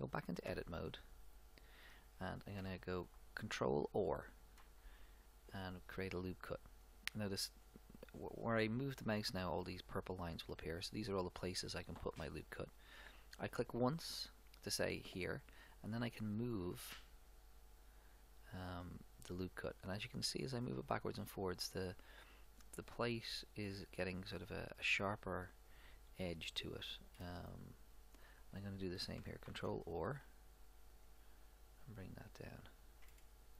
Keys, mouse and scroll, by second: 0.5 Tab, 1.4 middle click, 4.6 ctrl+r, 26.3-28.1 middle drag, 29.6 ctrl+r, 33.1-33.5 middle drag.